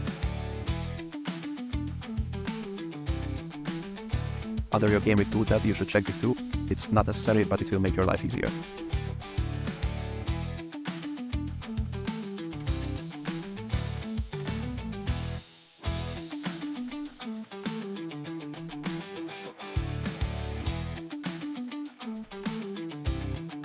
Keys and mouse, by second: 0.7 click, 1.0 h, 2.4-2.7 drag, 3.9 click, 6.1 click, 6.3 click, 7.6 shift+click, 8.0 click, 8.6 shift+click, 10.0 g, 10.1 y, 11.1 click, 11.8-12.8 typing, 12.2 click, 12.8 click, 12.9 click, 13.1 right drag, 14.2-15.5 typing, 15.1 ctrl+z, 15.3 drag, 16.6-23.6 typing, 17.0 shift+drag, 17.8 click, 18.0 click, 18.1 click, 20.2 click, 20.5 click, 21.5 click, 21.8 click, 22.5 click, 22.7 drag.